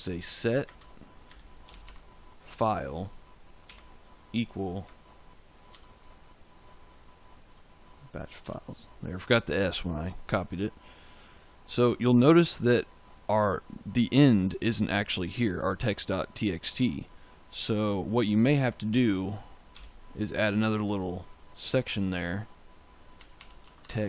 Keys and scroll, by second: 0.0-2.3 typing, 3.6 =, 5.6 ctrl+v, 8.4 s, 19.7 \, 22.8-24.0 typing.